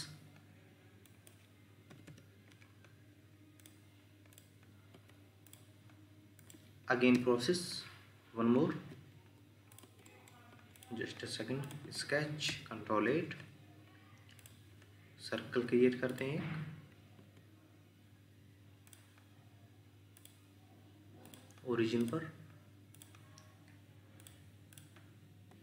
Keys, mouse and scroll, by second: 1.9 typing, 2.1 Return, 4.9 Escape, 7.1 ctrl+8, 8.7 ctrl+z, 9.8 Escape, 10.1 middle click, 10.5 Escape, 12.2 Escape, 12.5 ctrl+8, 17.2 Escape, 24.8 double click.